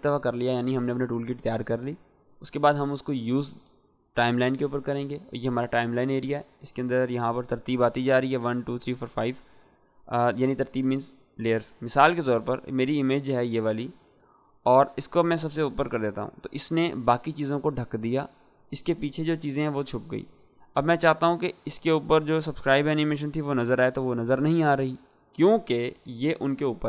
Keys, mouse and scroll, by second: 6.4-7.4 drag, 13.7-16.2 drag, 23.0-23.6 drag.